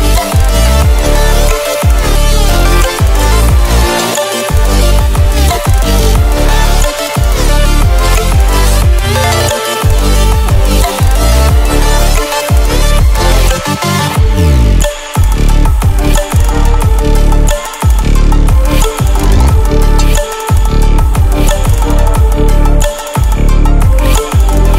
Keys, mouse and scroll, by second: 2.4-3.9 ctrl+alt+scroll down 2, 3.9 space, 4.1 click, 4.4 space, 7.9 click, 9.0 Delete, 9.9 click, 15.9-16.3 ctrl+alt+scroll up 1, 16.6 ctrl+alt+scroll up 1, 17.6 click.